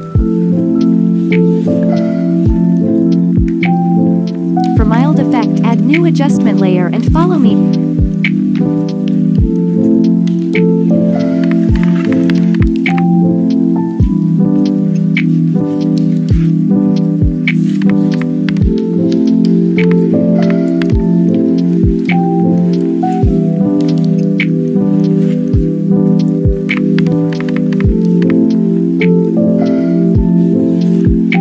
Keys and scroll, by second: 11.5-12.8 typing, 17.9-18.4 typing, 19.5-20.7 typing, 26.7-28.2 typing.